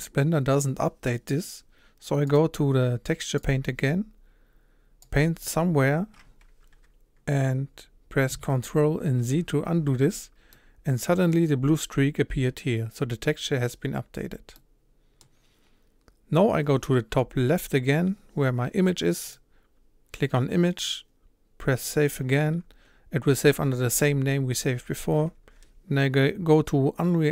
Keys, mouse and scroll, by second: 3.4-9.2 drag, 9.2 ctrl+z, 10.6-21.9 middle drag, 21.9-27.3 drag.